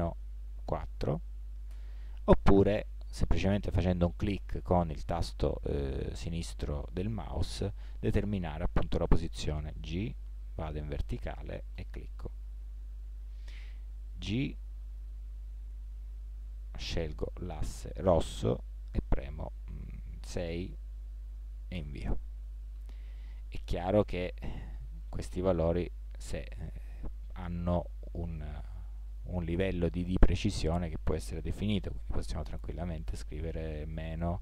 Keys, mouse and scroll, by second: 4.8 middle drag, 6.8-7.4 middle drag, 9.7 g, 12.6 drag, 12.7 middle click, 12.9 middle click, 14.5 g, 24.1 g.